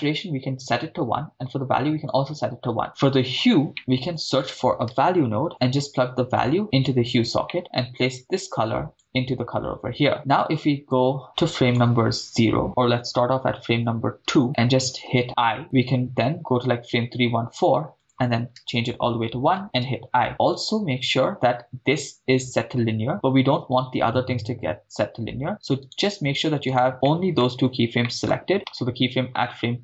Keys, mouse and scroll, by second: 0.0 click, 1.5 click, 3.7 middle click, 3.7 right click, 3.7 a, 3.9 a, 6.4-6.9 drag, 7.5 middle click, 8.2-9.2 drag, 10.1 middle click, 10.6 click, 11.2-11.9 drag, 13.0 Right, 13.1 Right, 13.2 Right, 14.0 Left, 15.3 i, 16.3 click, 18.0-19.0 drag, 19.9 i, 25.5 right click, 25.8 click, 25.8 right click, 26.7 click, 26.7 right click, 26.9 right click, 26.9 scroll up 4, 27.1 middle click, 27.7 scroll up 2, 28.1 middle click, 28.5 right click, 29.3-29.8 scroll down 5.